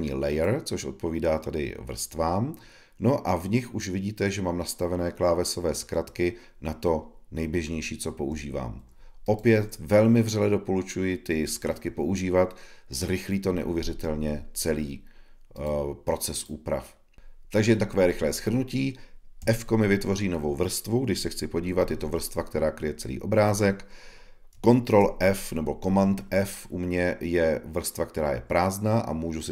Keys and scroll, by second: 8.1 ⟲, 24.8 super+f.